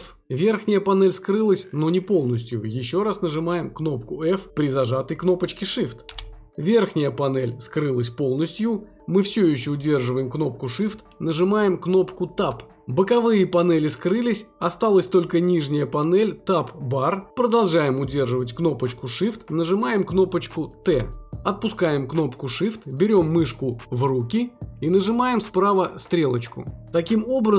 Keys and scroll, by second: 11.8 Tab, 21.0 t.